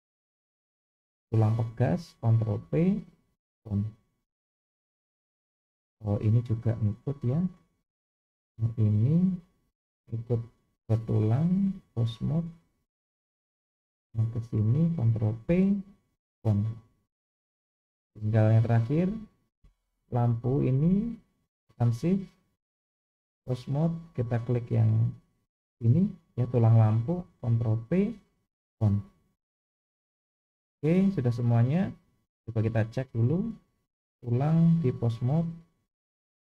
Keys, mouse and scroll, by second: 2.6 ctrl+p, 4.5-5.1 shift+middle drag, 6.0 click, 7.4-7.9 drag, 8.6 click, 10.5 shift+click, 11.6-12.5 drag, 14.3 click, 15.5 ctrl+p, 17.9-18.5 drag, 19.2 click, 21.8 shift+click, 23.0-23.6 drag, 24.4 click, 25.9-26.9 middle drag, 27.8 ctrl+p, 29.6-30.2 drag, 30.7-31.2 scroll down 2, 31.4-31.9 middle drag, 33.6 click, 34.8-35.3 drag.